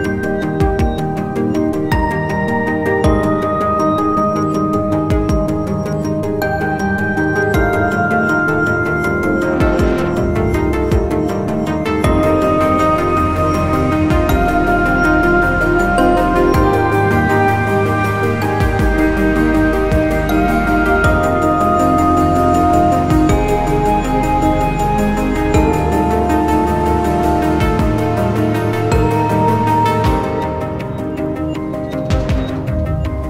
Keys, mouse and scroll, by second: 10.9 scroll down 1, 11.2-13.5 scroll up 1, 16.1-18.6 scroll down 1, 21.6-23.7 scroll down 1, 27.0-30.1 scroll up 1.